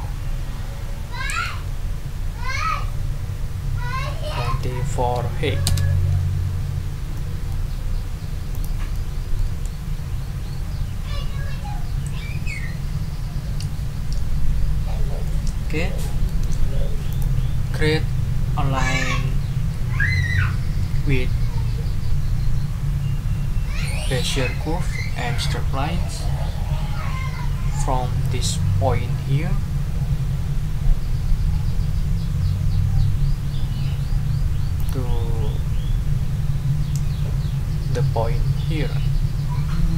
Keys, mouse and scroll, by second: 4.1-5.0 typing, 5.6 Return, 7.1 ctrl+click, 8.5 ctrl+click, 8.9 ctrl+middle click, 15.2-16.4 middle drag, 17.1 click, 34.8 click.